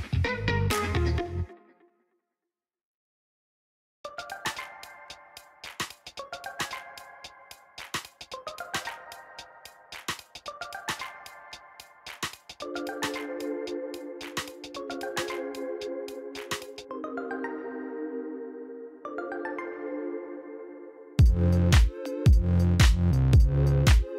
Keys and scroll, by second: 1.2-2.3 typing, 2.6 Return, 8.8 shift+a, 10.4 b, 10.6 u, 10.7 m, 13.4 shift+a, 14.2 w, 14.4 a, 14.7 v, 17.8 ctrl+t.